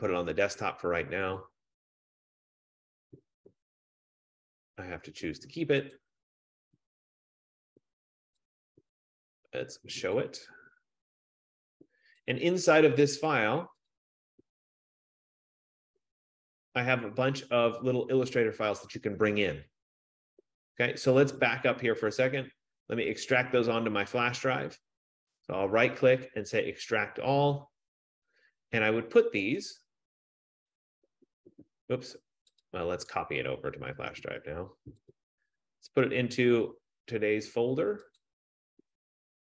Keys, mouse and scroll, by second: 2.0 click, 6.1 click, 8.7 click, 10.5 click, 12.6 click, 13.0 click, 14.1 click, 14.5 click, 15.4 click, 15.9 click, 22.1 F15, 22.6 click, 23.3 click, 24.4 click, 25.5 right click, 27.6 click, 29.8 click, 32.8 click, 33.5 right click, 35.3 click, 36.8 click, 38.7 click.